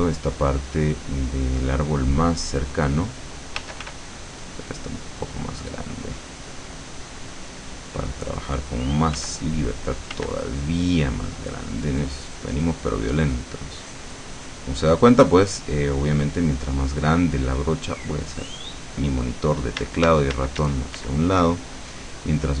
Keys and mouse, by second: 0.0-1.9 drag, 2.2-3.8 drag, 3.7 f, 4.1-6.8 drag, 9.3-11.2 drag, 9.3 f, 10.3 f, 11.4-14.9 drag, 15.1-16.8 drag, 18.2-22.6 drag.